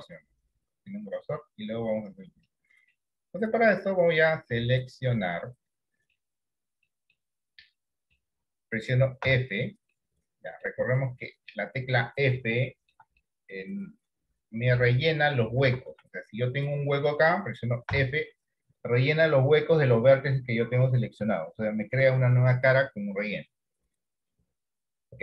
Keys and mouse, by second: 2.7 middle click, 4.1-6.2 middle drag, 7.2 middle click, 7.9 middle click, 9.3 f, 10.2 middle click, 11.1 middle click, 12.0 middle click, 12.7 shift+middle click, 13.4 middle click, 15.7 ctrl+z, 16.7 middle click, 17.9 f.